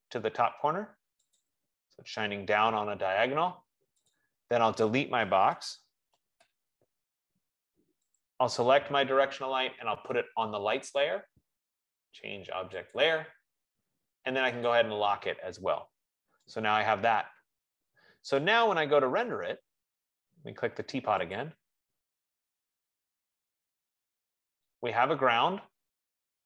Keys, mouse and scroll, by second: 2.0 click, 5.8-7.0 typing, 9.1 click, 12.1 F15, 12.1 right click, 14.0 click, 16.1 click, 20.1 right click, 22.1 click.